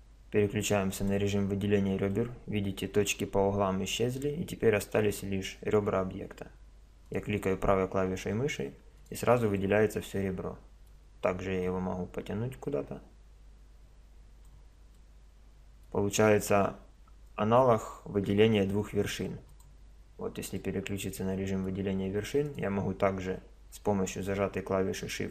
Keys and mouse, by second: 1.0-3.9 middle drag, 7.1-8.7 drag, 8.7 middle click, 9.0 click, 9.6-10.9 middle drag, 11.6-13.5 drag, 19.5-21.3 drag, 22.5-24.3 middle drag.